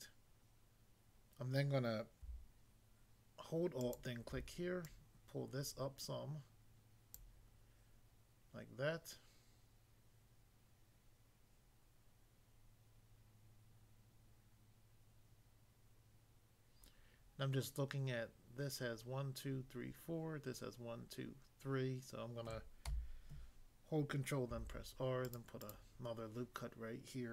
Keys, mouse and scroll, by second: 3.8 alt+click, 4.9 alt+click, 7.1 click, 22.9 a, 24.5 ctrl+r, 25.2 click, 25.6 click, 25.7 double click.